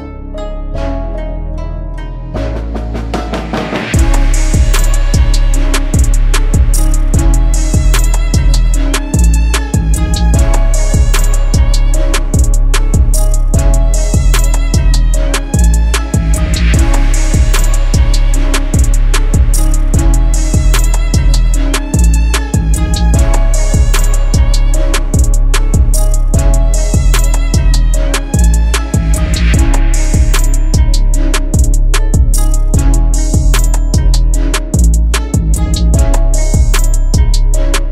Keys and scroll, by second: 0.6 Escape, 0.9 F4, 2.9 Delete, 5.5 c, 5.9 shift+F2, 6.7 Escape, 13.9 Escape, 14.5 F4, 15.1 Escape, 22.2 shift+Page_Up, 22.6 shift+F2, 22.9 F3, 28.1 Escape, 32.7 F4, 34.0 F2, 37.2 Escape.